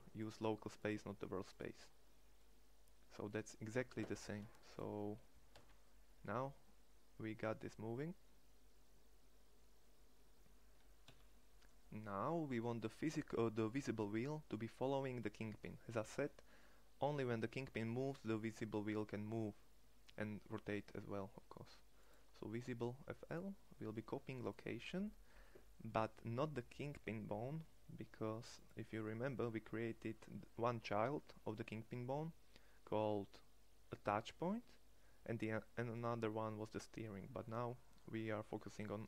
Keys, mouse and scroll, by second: 5.4 g, 13.7-29.5 middle drag, 29.5-30.9 drag.